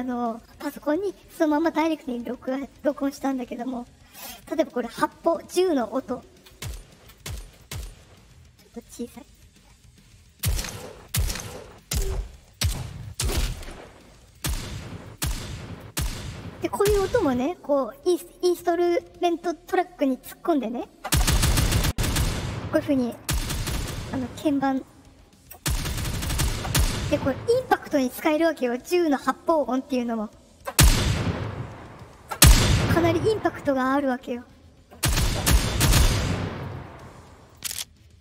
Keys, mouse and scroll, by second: 2.6 click, 6.4 click, 7.0 click, 7.4 click, 8.6 right click, 9.1 click, 10.2 click, 10.9 click, 11.6 click, 12.3 click, 13.0 click, 14.2 click, 15.0 click, 15.7 click, 16.6-17.3 drag, 24.7 click, 37.4 click.